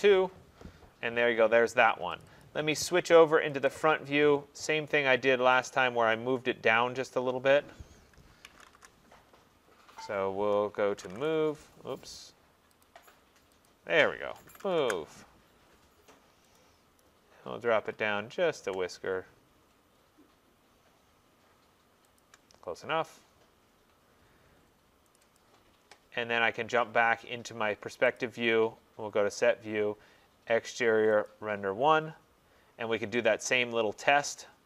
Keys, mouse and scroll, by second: 2.3 click, 2.5 click, 3.7 click, 3.9 click, 4.3-5.0 scroll, 5.7 click, 6.4 middle click, 6.5 middle click, 6.8 middle click, 7.2 middle click, 7.3 middle click, 7.4 middle click, 7.7 middle click, 8.5 typing, 10.7-11.4 typing, 10.8 scroll, 12.9 click, 13.7 click, 14.4 typing, 14.9 Return, 16.6 click, 18.0 typing, 18.9-19.5 scroll, 22.2 shift+click, 22.8-23.3 scroll, 25.2 click, 25.4 click, 28.2 click.